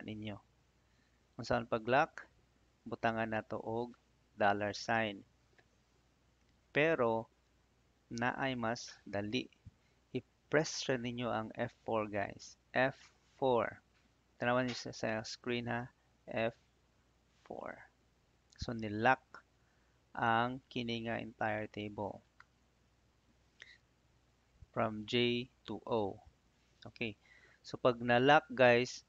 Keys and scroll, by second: 16.8 F4, 28.2 '.